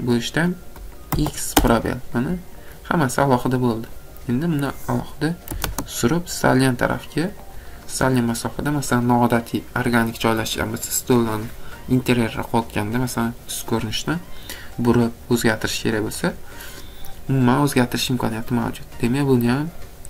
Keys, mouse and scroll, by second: 1.1 x, 1.4 scroll down 2, 2.8 scroll down 3, 3.9 click, 4.0 scroll, 4.6 click, 5.5 m, 7.0 click, 7.5 click, 7.7 scroll, 14.7 middle click, 14.8-15.6 scroll, 15.6 scroll, 18.7 scroll, 19.3-19.6 scroll, 19.9 scroll.